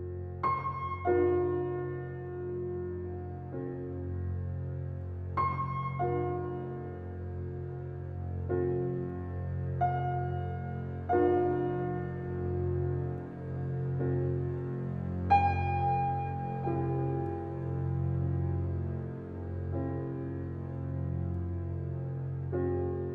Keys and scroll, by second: 0.7 Left, 2.9 Left, 4.6 Left, 7.0 Left, 8.6 Left, 10.0 Left, 11.3 Left, 13.5 Left, 15.7 Left, 17.4 Left, 19.4 Left, 20.8 Left, 22.4 Left.